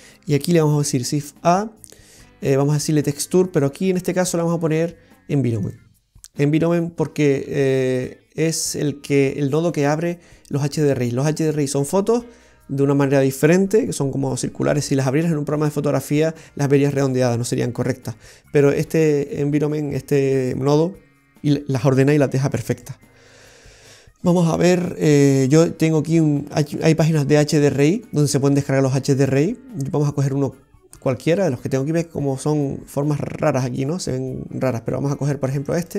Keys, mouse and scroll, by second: 0.5 shift+a, 6.7 typing, 8.0 click, 22.8 click, 26.5 click, 27.7 click, 29.2 click, 31.2 click, 35.7 click.